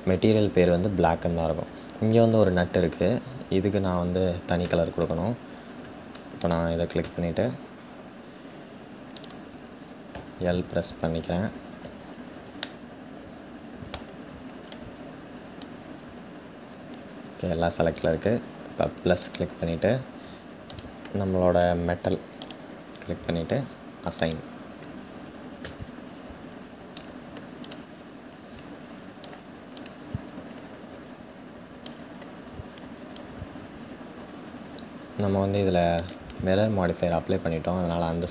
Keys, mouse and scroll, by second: 2.5-4.2 scroll up 5, 4.2-5.4 scroll up 1, 5.4-6.1 scroll up 1, 6.1-6.6 scroll up 1, 6.6-7.8 scroll up 1, 7.8-8.1 scroll down 1, 12.3-15.2 middle drag, 15.2 click, 18.9-25.2 drag, 25.2 Tab, 26.6 click, 27.5-28.0 scroll down 3, 28.9 click, 29.6-30.9 scroll down 2, 31.5-35.7 drag.